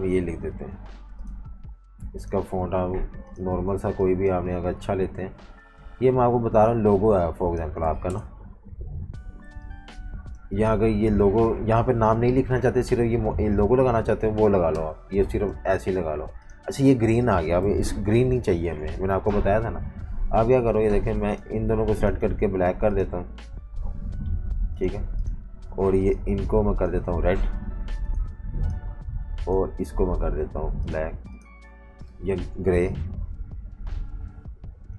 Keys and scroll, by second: 3.7 v, 3.9 space, 4.4 space, 6.8 typing, 8.1 shift+super+], 8.5 typing, 14.7 Delete, 16.7 typing, 17.7 super+-, 17.8 super+-, 18.5-19.8 typing, 32.3 super+z.